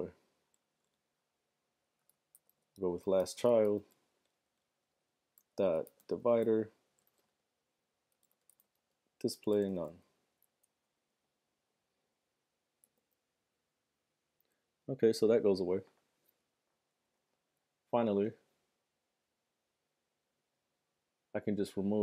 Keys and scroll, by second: 0.8 Left, 2.4-11.7 typing, 13.0 super+r.